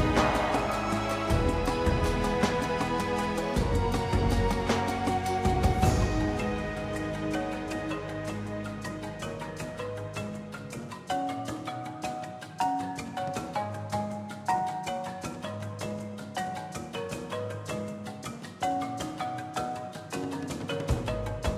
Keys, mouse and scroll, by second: 0.5 g, 2.8 middle click, 3.2 scroll down 3, 3.5 click, 4.0 KP_Divide, 4.2 KP_1, 5.0 shift+middle click, 5.3 ctrl+s, 6.5 click, 6.9 ctrl+s, 7.0 scroll down 2, 7.2-9.7 drag, 9.7 t, 10.9-11.7 drag, 11.7 z, 13.1 click, 13.3-15.9 drag, 15.9-16.8 scroll down 13, 16.4 drag, 16.8-17.7 drag, 17.7 scroll down 3, 17.9-18.3 shift+middle drag, 18.3 shift+a, 18.4-19.5 middle drag, 19.5 shift+a, 19.7 g, 20.5 scroll down 4, 20.7-21.5 middle drag.